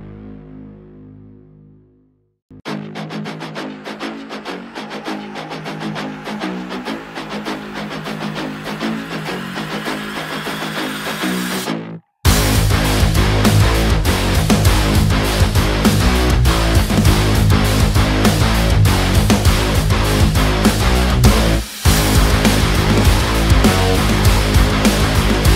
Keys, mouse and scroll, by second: 1.9 click, 2.1 space, 2.2-4.0 ctrl+drag, 4.1 ctrl+t, 4.6 click, 6.4 ctrl+space, 6.9-8.6 ctrl+drag, 8.6 space, 8.7 click, 8.9 space, 9.7 click, 10.9-22.2 drag.